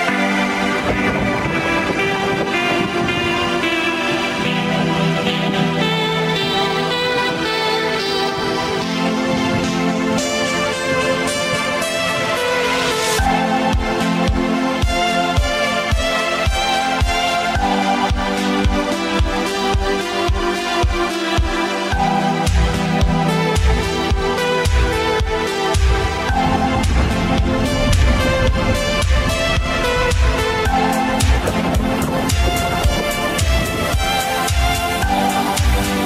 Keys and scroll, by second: 0.8 Left, 1.1 w, 1.4 ctrl+d, 3.7 Left, 4.1 space, 5.6 r, 7.3 w, 8.9 r, 12.2 r, 13.0 w, 13.7 w, 15.8 r, 16.3 w, 19.2 space, 19.7 space, 20.7 ctrl+s, 23.0 ctrl+z, 27.1 ctrl+z, 27.3 r, 30.4 w, 32.8 -.